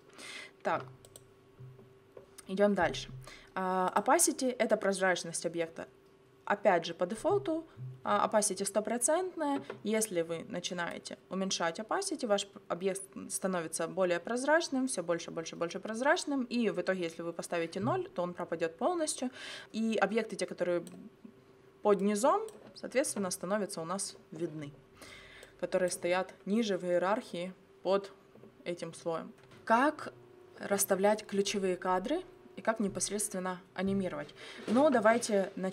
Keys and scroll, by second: 0.8 0.